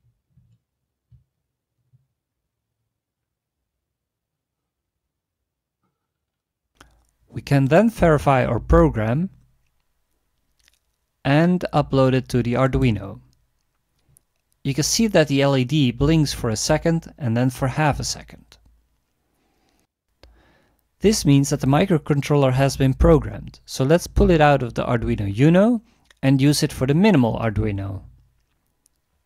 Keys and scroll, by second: 0.0-0.4 typing.